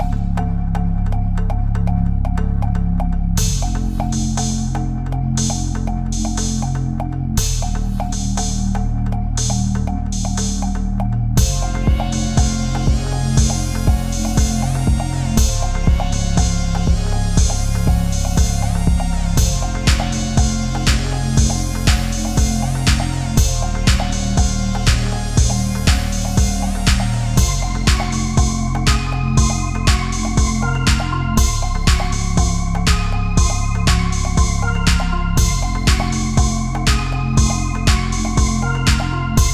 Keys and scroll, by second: 1.8 Left, 2.4 ctrl+z, 3.3 ctrl+c, 3.5 ctrl+shift+v, 4.4 Up, 5.1 space, 10.9 Right, 12.8 Left, 15.2 Down, 18.5 Right, 19.1 Up, 19.2 Down, 21.6 Delete, 25.5 space, 29.1 Menu, 29.4 ctrl+-, 31.6 ctrl+-, 35.9 ctrl+-, 36.2 ctrl+=, 36.4 space, 38.7 ctrl+=.